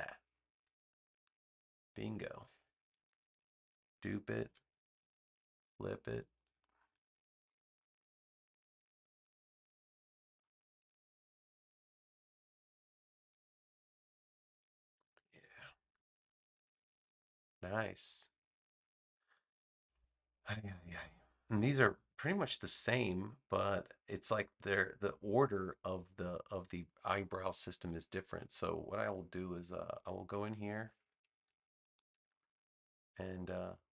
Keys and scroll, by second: 3.3 super+j, 4.4 v, 6.4 space, 15.8 super+-, 17.6 space.